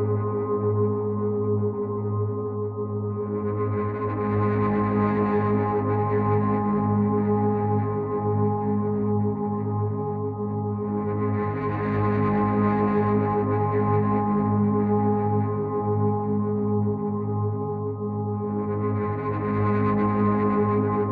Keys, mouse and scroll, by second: 2.0 click, 3.6 click, 9.7 click, 11.5 click.